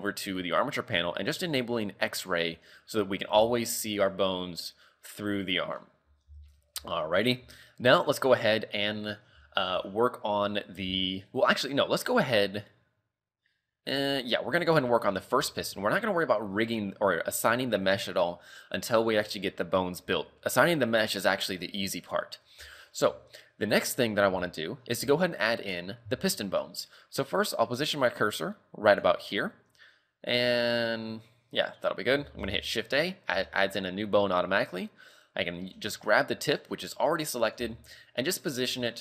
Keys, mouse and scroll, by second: 2.2 click, 3.4 a, 3.6 scroll down 4, 4.0 middle click, 5.1 middle click, 5.9 KP_3, 6.1 scroll up 3, 6.3 z, 6.8 ctrl+w, 7.7 shift+middle click, 8.0 scroll up 3, 8.7-9.3 scroll down 5, 9.5 shift+middle click, 14.2 scroll up 5, 14.7 shift+middle click, 15.1 scroll down 4, 15.5 shift+middle click, 20.2 scroll up 3, 22.7 shift+middle click, 23.1-23.7 scroll up 2, 23.7 middle click, 24.4 KP_3, 25.0 scroll down 3, 25.2 shift+middle click, 25.6 scroll up 2, 26.3 shift+middle click, 26.8 scroll up 3, 28.9 click, 32.4 shift+a, 33.1-33.5 scroll down 3, 33.5 shift+middle click, 37.6 g, 38.9 shift+middle click.